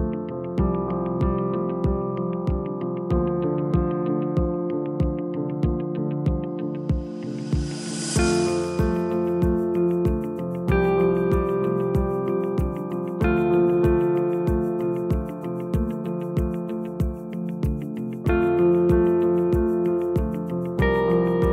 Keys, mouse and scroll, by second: 3.1 g, 6.7 click, 7.4-9.1 scroll up 5, 9.1 scroll up 1, 9.3 r, 12.5 s, 13.8-16.4 right drag, 16.4 click, 17.3-18.7 scroll down 1, 18.7-19.4 scroll down 1, 19.4 s, 21.0 g.